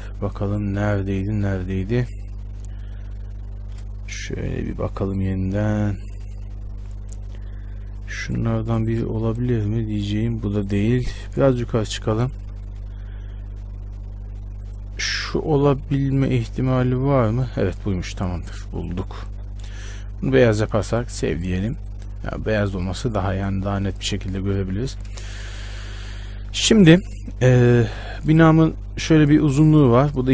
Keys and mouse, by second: 23.6 Tab, 24.1 Tab, 24.7 a, 25.1 a.